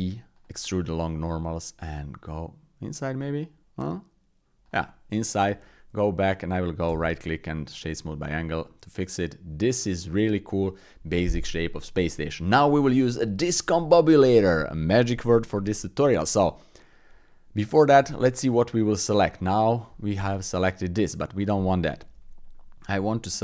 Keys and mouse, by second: 5.5 Tab, 6.9 w, 8.7 click, 9.9 shift+click, 10.6 click, 11.7 click, 17.9 Tab, 19.0 shift+click, 19.4 click, 22.0 KP_1, 23.1 shift+click.